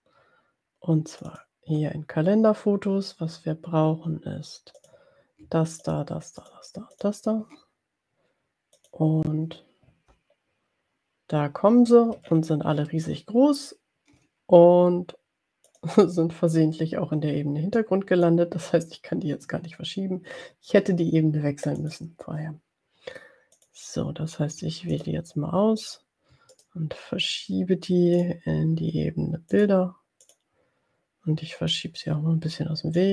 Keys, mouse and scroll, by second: 1.3 click, 4.8 click, 5.8 ctrl+click, 6.4-6.7 ctrl+drag, 6.9 ctrl+click, 8.7 click, 12.5-12.9 ctrl+scroll down 2, 15.8 click, 18.0 click, 22.0 click, 23.5 click, 25.2 shift+click, 25.8 shift+click, 26.5 right click, 28.3 click, 29.5 click, 30.4 click, 31.8-33.1 drag.